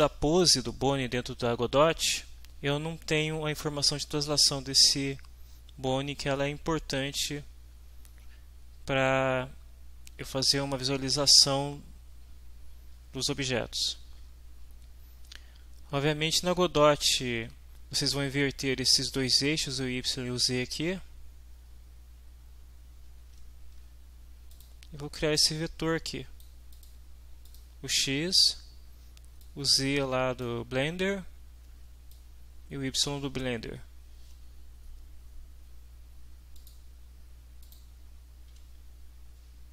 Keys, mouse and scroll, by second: 23.2 alt+Tab, 24.6 click, 25.3-26.6 drag, 26.7 click, 27.5 click, 29.4-30.6 drag, 32.1 click, 36.6 click, 37.6 click.